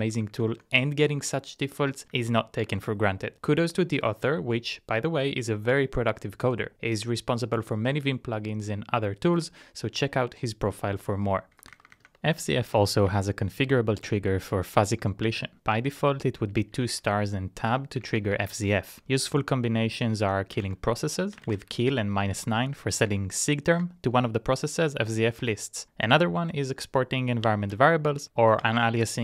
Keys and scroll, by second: 0.1 Down, 0.3 Down, 0.5 Down, 1.2 Up, 1.4 Up, 2.1 Up, 2.9 Return, 11.5-12.4 typing, 13.1 Tab, 15.2 Tab, 15.7 Tab, 15.9 Tab, 16.7 shift+Tab, 16.9 shift+Tab, 17.1 shift+Tab, 18.0 Page_Down, 18.2 Page_Down, 18.3 Page_Down, 18.5 Down, 18.6 Down, 20.6-22.0 typing, 22.8 Up, 23.1 Up, 23.9 Return, 27.6 ctrl+c, 28.0 shift+8, 28.6 Tab.